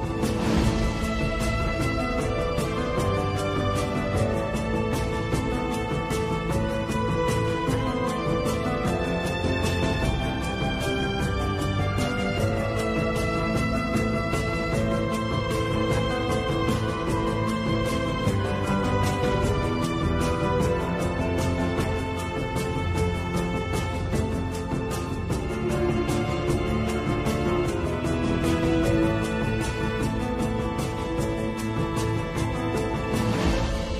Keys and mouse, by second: 7.4 z, 8.4 click, 10.3 g, 13.5 click, 15.0 g, 18.0 click, 19.8 click, 21.3 g, 26.1 click, 28.1 click, 29.3 g, 31.6 click, 33.0 g.